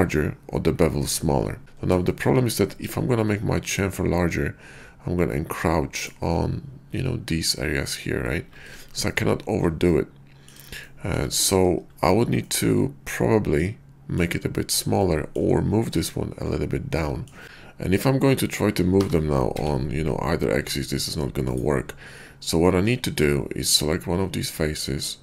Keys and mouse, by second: 2.1 shift+click, 2.8 ctrl+b, 6.0 shift+click, 8.6 ctrl+z, 9.8 click, 10.8 shift+click, 12.3-14.2 middle drag, 15.0 shift+click, 17.0 middle click, 17.4 middle click, 18.9 g, 19.5 x, 21.5 click, 22.6 middle click, 23.6 click.